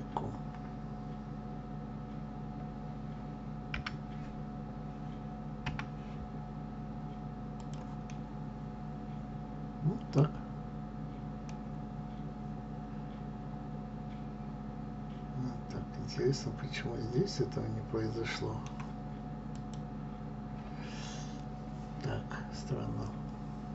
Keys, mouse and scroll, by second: 3.9 g, 8.2-10.3 middle drag, 10.3 scroll down 3, 11.7-14.6 middle drag, 19.8 click.